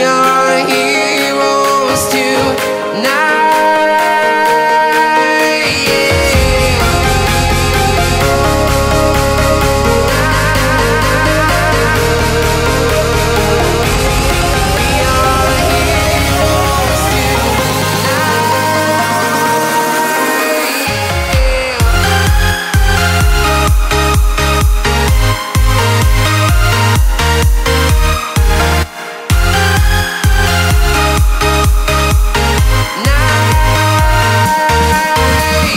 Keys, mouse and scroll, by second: 2.9 shift+click, 3.6 scroll down 1, 6.5-10.5 drag, 10.5 scroll down 1, 11.7 click, 12.8 click, 13.8-14.2 scroll down 1, 15.0 scroll up 1, 15.3 Return, 16.7 right click, 17.4-17.7 scroll up 1, 19.1 click, 19.7 scroll down 1, 21.4 right click, 22.9-23.2 scroll down 1, 23.7 click, 24.3-24.7 scroll up 1, 25.2 click, 25.4-26.2 scroll down 1, 26.2-27.7 right drag, 27.7 click, 29.5 scroll down 1, 29.7-31.5 right drag, 31.5 click, 33.0 click, 34.2 scroll up 1, 35.1-35.7 right drag.